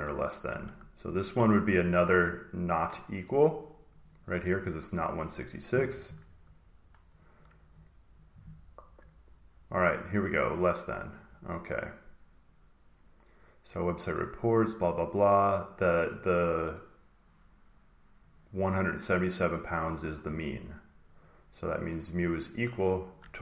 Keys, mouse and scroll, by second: 0.0-0.5 scroll down 1, 0.5 scroll, 0.6-3.3 scroll down 2, 3.3 scroll down 1, 3.4 click, 3.9 click, 4.1 click, 7.1 click, 7.7 click, 10.8 click, 11.7 click, 15.2 click, 18.2-20.3 drag, 20.4-21.8 drag, 21.9 click, 23.1 click.